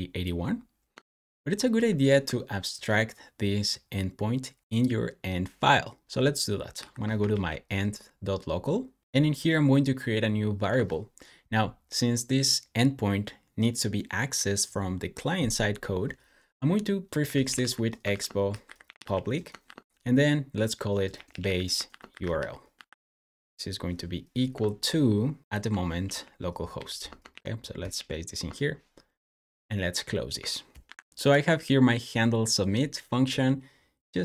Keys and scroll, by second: 1.6 super+c, 6.6 super+p, 6.9-9.5 typing, 17.0-19.5 typing, 20.9-23.1 typing, 25.9 super+c, 26.6 super+j, 27.2 super+v, 27.8 super+s, 30.7 super+w.